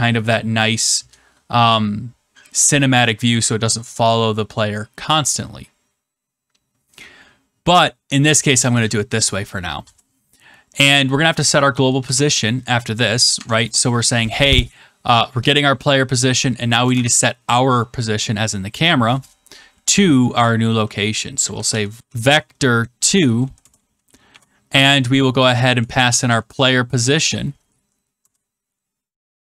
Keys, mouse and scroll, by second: 6.8 middle click, 6.9 middle click, 8.2 click, 9.7 Return, 11.4-12.5 typing, 13.3 Tab, 16.9 =, 21.1-22.5 typing, 23.3 Down, 23.5 Return, 24.2 typing, 25.5-26.7 typing, 27.7 Down, 28.1 Return.